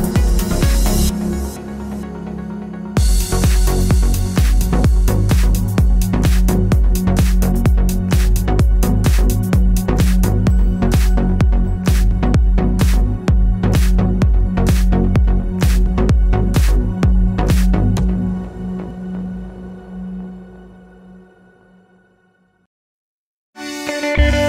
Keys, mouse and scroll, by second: 2.2 click, 3.9-4.5 drag, 4.5 Tab, 9.3-10.5 drag, 10.7 click.